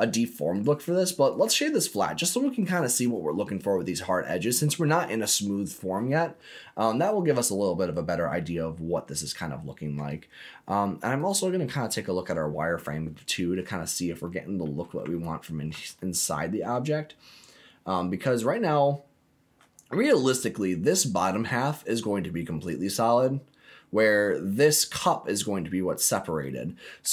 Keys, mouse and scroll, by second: 0.5 right click, 1.8 middle click, 6.3 scroll up 2, 7.2-8.9 middle drag, 8.9-9.3 scroll down 2, 9.3 middle click, 11.3 click, 11.7 middle click, 12.6 scroll up 2, 13.7 scroll down 2, 14.2 middle click, 15.1 ctrl+middle click, 15.9 shift+middle click, 26.0-26.4 scroll down 1, 26.4 middle click.